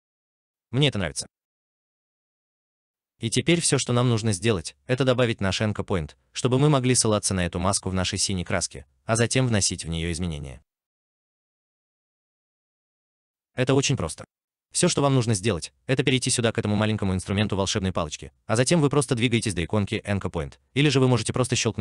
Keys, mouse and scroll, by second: 0.1 alt+right click, 5.2 alt+right click, 5.2 alt+click, 5.8 alt+middle click, 6.3 alt+right click, 6.7 alt+click, 21.5 right click.